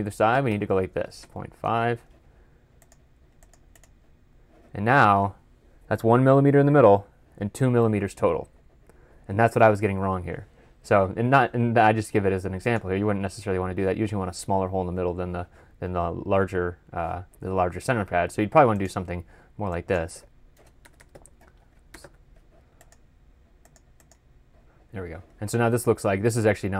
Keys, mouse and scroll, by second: 0.4-2.5 typing, 1.5 Tab, 3.6 double click, 19.8-22.4 typing, 23.9 double click.